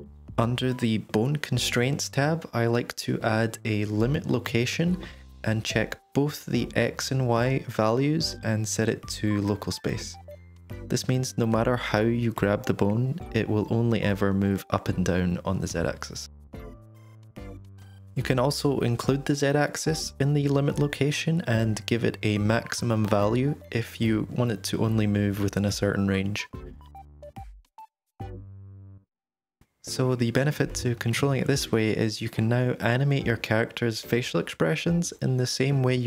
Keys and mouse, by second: 1.2 click, 2.2-5.8 drag, 6.6 drag, 7.2-7.8 drag, 8.3-8.8 drag, 9.2-10.3 drag, 11.6 click, 12.0 g, 19.2-19.8 drag, 20.7-23.1 drag, 23.4 g, 25.3-26.6 drag, 27.4 g, 30.8 click, 32.1-36.0 typing, 32.8-33.3 drag, 35.8 click.